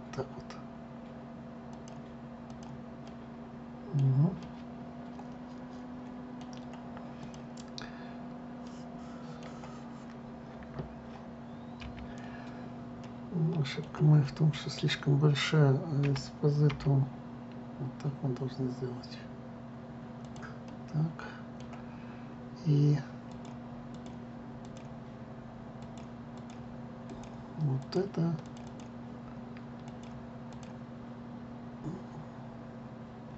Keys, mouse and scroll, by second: 3.1 click, 3.7-7.2 middle drag, 7.9 click, 9.3-12.4 middle drag, 12.5 KP_3, 13.7-14.6 middle drag, 16.7 s, 21.3-24.0 middle drag, 24.0-25.4 drag, 26.5-27.9 drag, 28.5 click, 29.1 click, 29.3 click, 30.5 click, 31.2 click.